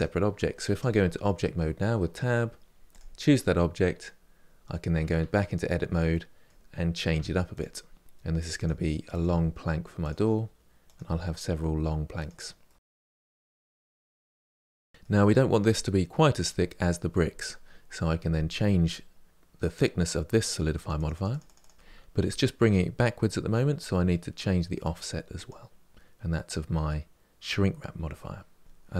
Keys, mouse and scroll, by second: 0.6 Tab, 2.7 click, 5.0 Tab, 5.9-7.0 middle drag, 7.0 1, 7.3 click, 8.1 g, 8.7 click, 8.7 g, 9.3 click, 9.8-13.2 typing, 9.9 middle click, 10.1 click, 11.0 click, 11.8 click, 12.4 click, 13.0 click, 14.6-17.1 middle drag, 20.5-21.5 drag, 22.0-24.6 middle drag, 24.6-25.9 drag, 27.9 middle click, 28.6 click.